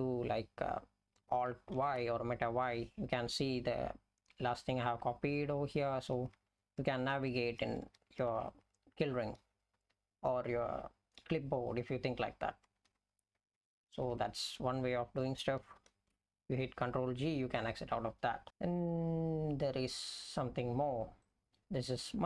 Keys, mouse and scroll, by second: 1.8 alt+y, 5.0 Down, 6.2 Down, 6.4 Down, 6.8 Down, 7.4 Up, 7.5 Up, 7.7 Up, 7.9 Up, 8.2 Down, 8.4 Down, 8.6 Down, 9.2 Down, 9.5 Up, 9.7 Up, 12.9 Left, 13.4 Up, 13.6 Up, 13.9 Down, 14.1 Down, 14.2 Down, 15.8 ctrl+g.